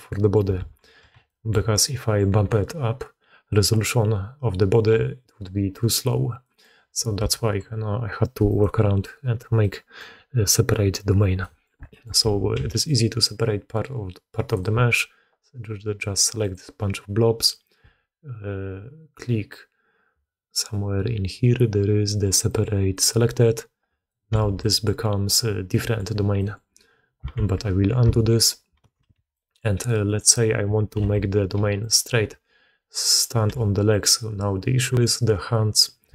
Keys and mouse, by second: 0.0 middle drag, 0.5 alt+a, 1.1 shift+middle drag, 1.9 click, 6.3 middle drag, 7.1 alt+a, 8.4 click, 9.5-9.9 drag, 11.3 click, 11.8 click, 12.1 alt+a, 12.4 c, 16.4-23.4 drag, 23.9-24.2 alt+drag, 24.3 alt+a, 24.5 drag, 25.5-25.9 drag, 26.2 drag, 27.5 ctrl+z, 28.9 alt+a, 29.2 drag, 30.0 click, 30.8 KP_3, 31.5 g, 32.3 r, 33.4 g.